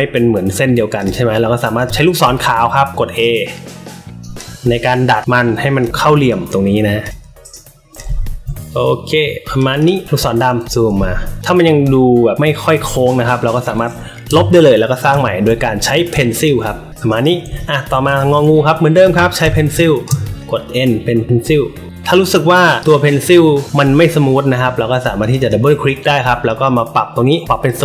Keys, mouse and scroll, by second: 0.9 click, 1.7 click, 3.3-4.3 drag, 5.1 click, 6.2 click, 7.5 click, 8.1 alt+scroll up 2, 8.6 click, 9.7 click, 11.8 alt+middle click, 11.8 alt+scroll up 1, 12.8 alt+middle click, 12.8 alt+scroll up 1, 13.4 click, 14.2 Delete, 15.0 n, 15.7 alt+middle click, 15.7 alt+scroll up 2, 16.1 space, 16.2 click, 16.9 click, 16.9 space, 17.5 alt+middle click, 18.0 space, 18.1 click, 18.5 alt+middle click, 19.4 n, 19.7 space, 19.8 click, 20.4-21.8 drag, 25.2 click, 25.3 click, 26.4 drag, 27.2-27.6 drag.